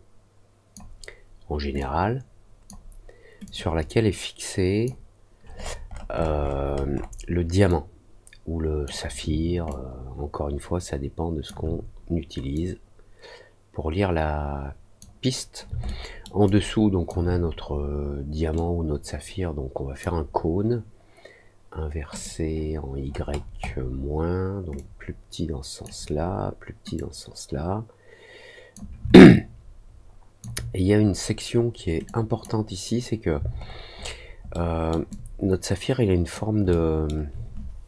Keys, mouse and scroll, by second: 1.7 click, 3.4-4.8 drag, 5.5 middle click, 5.8 middle click, 6.1 middle click, 6.3 middle click, 6.6 middle click, 7.6-8.8 drag, 9.6-11.4 alt+drag, 12.5-14.9 drag, 15.8 alt+middle click, 16.4 alt+click, 18.5-19.9 drag, 22.1 click, 23.0 middle click, 23.3 middle click, 23.6 middle click, 24.7-25.8 drag, 26.9-28.7 drag, 29.1-30.3 alt+drag, 32.0 click, 33.5 alt+middle click, 33.9 alt+middle click, 34.5 alt+middle click, 35.0-36.3 alt+drag, 36.6 alt+middle click.